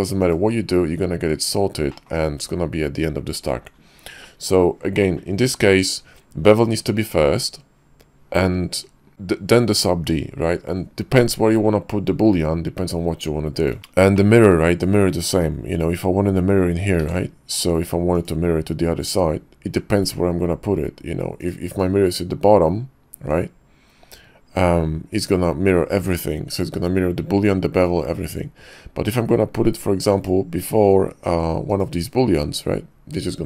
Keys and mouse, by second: 0.2 click, 1.9 click, 14.1-14.4 shift+drag, 17.0 alt+x, 18.1 click, 21.4 click, 30.1 click, 31.8-33.4 drag.